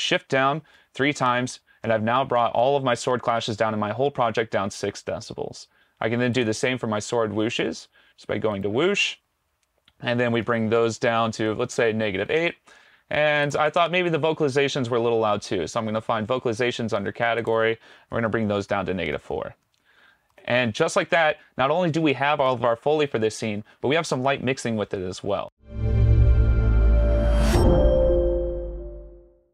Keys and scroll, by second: 0.8 shift+Down, 1.5 shift+Down, 10.5 shift+Down, 18.7 shift+Down, 20.3 shift+Return, 20.9 Return.